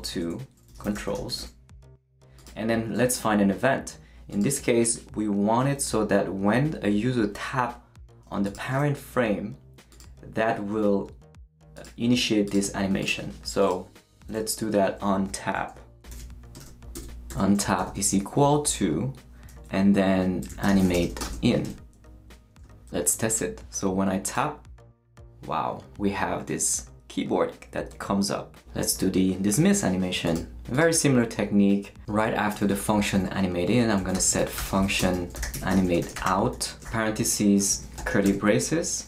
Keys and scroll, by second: 0.0-1.9 typing, 14.0 space, 16.0-17.8 typing, 20.3-21.5 typing, 21.6 shift+Return, 22.4 Return, 22.6 shift+super+Left, 32.5 Return, 33.8-38.0 typing, 37.6 shift+Right, 38.2 shift+Return.